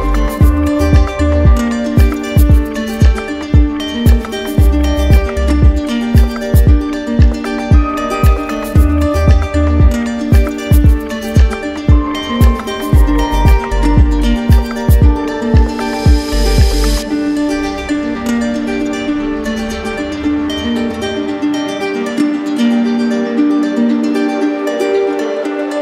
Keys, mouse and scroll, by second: 4.2 click, 9.3 click, 10.7 click, 10.9 ctrl+z, 13.2 click, 13.4 ctrl+z, 15.5 ctrl+z, 15.5 ctrl+click, 16.1 ctrl+z, 21.2 click.